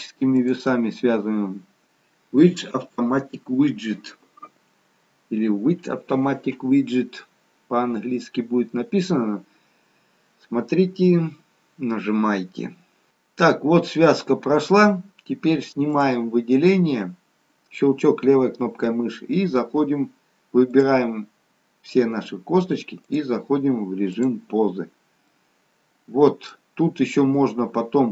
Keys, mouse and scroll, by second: 15.4-16.0 scroll up 1, 16.0 click, 16.8-18.3 scroll down 2, 20.7 click, 24.9-25.7 scroll up 3, 25.4 middle click.